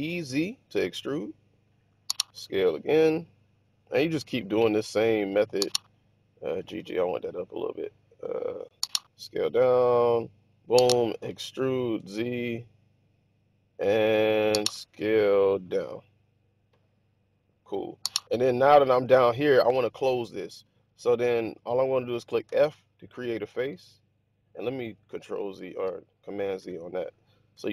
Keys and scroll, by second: 2.2 typing, 6.3 typing, 9.0 typing, 11.1-11.9 typing, 15.4 typing, 18.7 typing, 22.4 typing, 23.7-25.0 typing, 25.6 super+z, 27.5 z.